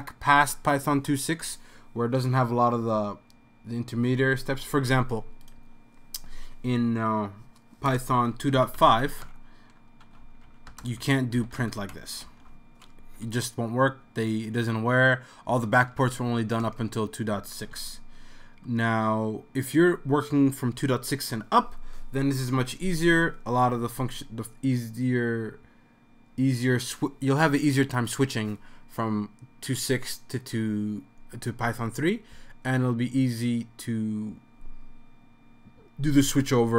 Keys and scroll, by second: 8.3-12.7 typing, 13.8 Right, 16.0-16.4 typing, 17.8 typing.